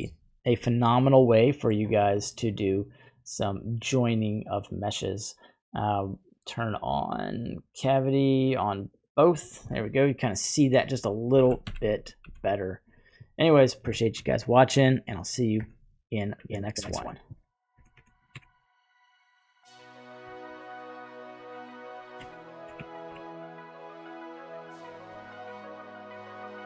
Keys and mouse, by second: 0.0 click, 0.1-1.7 middle drag, 4.7-9.4 drag, 9.7-10.6 middle drag, 11.4 b, 12.2 n, 12.2 m, 13.2 middle click, 14.0 shift+middle click, 15.6 Tab, 16.1 right click, 17.7 Tab, 17.7 Tab, 18.2 Tab, 18.2 right click, 18.3 Tab, 21.1 click, 21.7 right click, 22.3 alt+shift+click, 23.0 ctrl+b, 25.1 Tab, 25.5-26.1 middle drag.